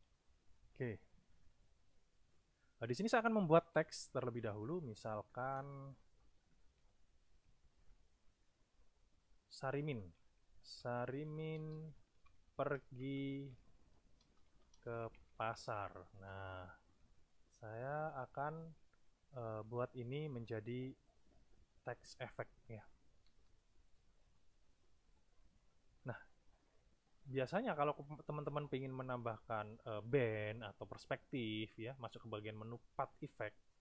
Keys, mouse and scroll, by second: 0.6 alt+Tab, 2.3-3.2 drag, 3.7 t, 4.4 click, 7.7 shift+s, 8.2 shift+i, 9.8-15.4 typing, 18.4 click, 19.3-20.4 drag, 20.7-21.9 ctrl+shift+drag, 22.2 ctrl+shift+click, 22.4 ctrl+shift+middle click, 22.4 ctrl+click, 23.2 =, 23.8 middle click, 24.2 =, 24.6 click, 31.5 click, 33.1 click.